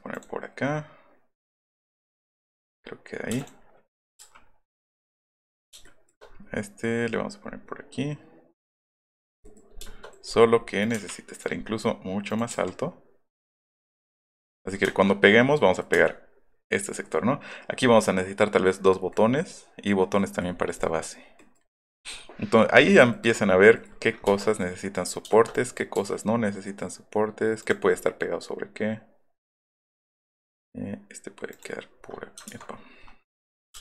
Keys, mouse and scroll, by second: 2.5 click, 3.3 space, 3.4 click, 4.2 m, 9.1 click, 9.5 shift+middle click, 10.9 Up, 11.5 middle click, 13.8 click, 13.9 middle click, 15.3 middle click, 15.8 middle click, 17.0 middle click, 19.0 middle click, 19.5 middle click, 20.7-22.8 middle drag, 22.8-23.4 scroll down 1, 25.1 middle click, 25.5 click, 27.6 click, 27.9 F3, 27.9 middle click, 29.2 middle click, 31.5 click, 32.5 ctrl+z, 32.7 scroll up 1, 33.7 space.